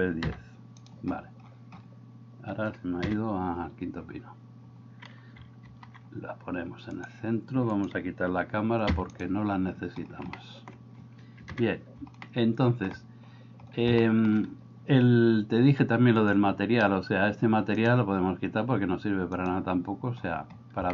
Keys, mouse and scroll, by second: 0.3 s, 3.1 KP_7, 5.7 alt+g, 10.4 middle click, 11.6 KP_7, 12.3 shift+middle click, 14.1 shift+middle click.